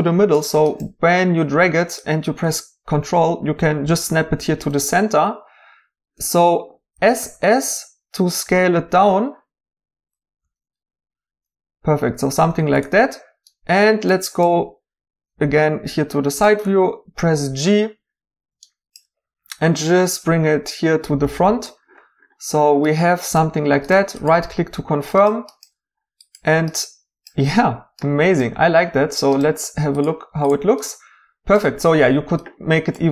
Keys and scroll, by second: 6.9 s, 7.2 s, 10.4-11.0 typing, 16.6 g.